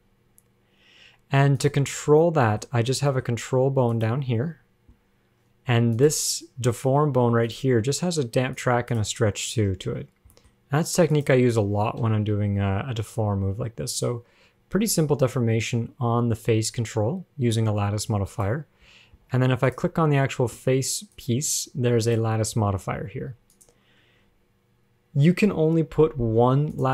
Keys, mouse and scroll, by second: 2.1-3.5 scroll up 6, 2.4 middle click, 3.3 shift+middle click, 4.1 click, 6.2 click, 7.7 click, 8.8 click, 9.2 click, 9.6 click, 10.3 scroll down 3, 10.6 middle click, 10.8-11.3 scroll up 1, 11.3 click, 12.2 KP_1, 13.3 g, 19.3 ctrl+Tab, 19.9 click, 21.3 click, 22.3 click, 23.8 click.